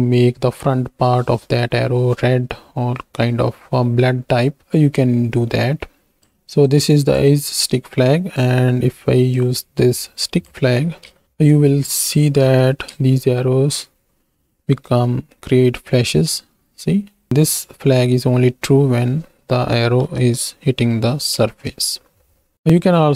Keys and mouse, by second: 6.6 click, 8.2 click, 9.3-10.6 drag, 11.1 ctrl+space, 12.4 shift+Right, 12.5 shift+Left, 13.0 space, 17.3 space, 17.7-19.3 drag, 21.0 KP_1, 21.7 ctrl+space.